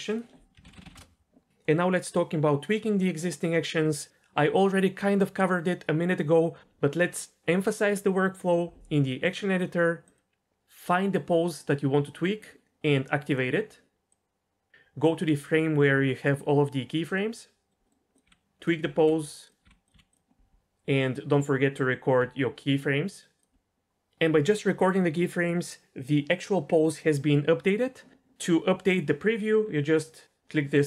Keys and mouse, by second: 0.0 click, 10.1 click, 14.1 click, 18.2-19.9 typing, 18.6 click, 19.8 click, 22.2 i.